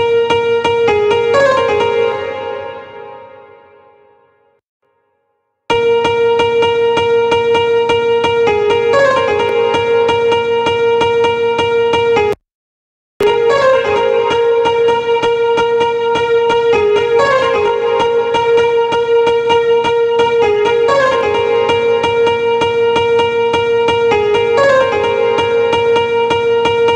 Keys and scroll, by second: 1.6 space, 5.1 space.